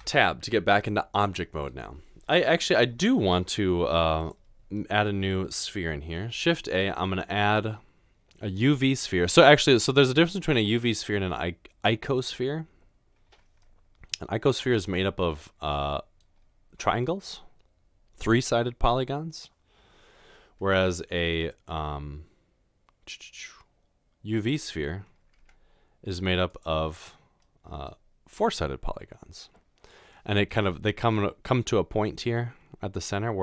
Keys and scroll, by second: 0.0 Tab, 6.4 typing, 20.8 shift+a, 25.5 g.